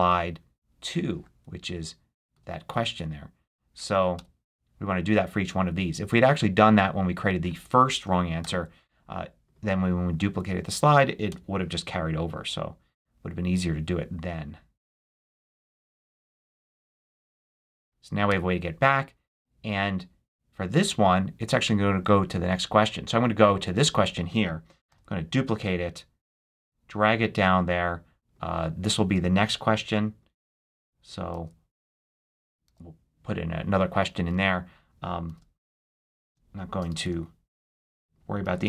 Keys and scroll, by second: 2.2 2, 4.0 Return, 8.3 super+k, 10.4 2, 11.1 Return, 15.7 super+k, 17.7 2, 18.1 Return, 24.7 super+d, 31.2 super+c, 32.2 super+a, 34.2 super+a, 34.9 shift+super+a, 36.1 shift+b, 36.7 shift+super+b, 36.8 shift+super+a, 37.4 shift+super+b, 37.9 shift+b, 38.5 super+a.